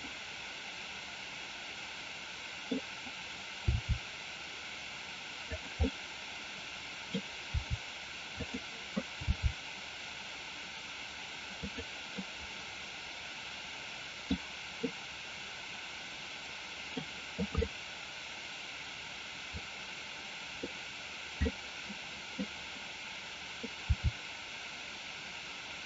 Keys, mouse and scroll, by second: 1.4-2.8 middle drag, 3.8 r, 5.9-7.1 middle drag, 7.6 r, 8.5 click, 9.3 g, 11.6 click, 12.3-14.4 middle drag, 14.9-17.0 middle drag, 17.8-20.8 middle drag, 21.6 middle click, 23.9 r.